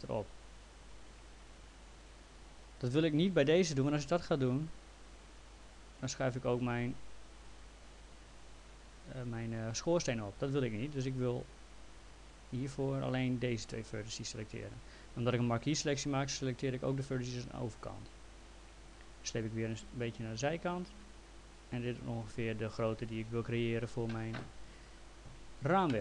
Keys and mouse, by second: 4.6 click, 6.7 click, 10.6 ctrl+z, 12.0 click, 13.7 click, 15.7 click, 18.9 click.